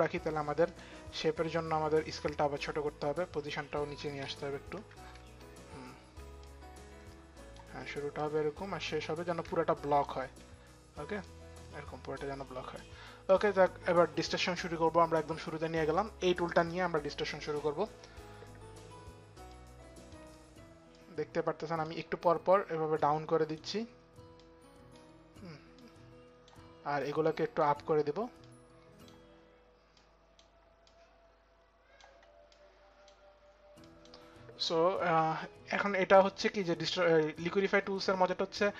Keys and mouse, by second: 0.2 click, 1.1 click, 3.6 click, 4.4 click, 4.4 shift+Down, 6.0 shift+Down, 6.0 click, 8.0 click, 10.2 click, 10.8 click, 12.4 click, 15.0 click, 16.1 click, 19.0 click, 20.3 click, 20.5 click, 22.4 click, 22.5 click, 24.0 click, 25.4 click, 26.6 click, 28.0 click, 29.5 click, 32.2 click, 33.4 click, 35.8 click, 37.5 click.